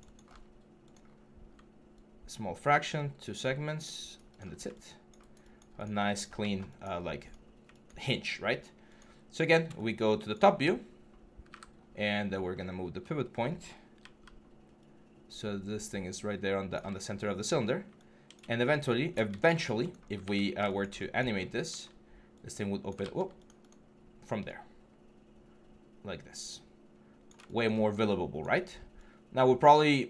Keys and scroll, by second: 9.2 4, 13.8-18.8 typing, 21.9 w, 21.9 e, 22.8 ctrl+z.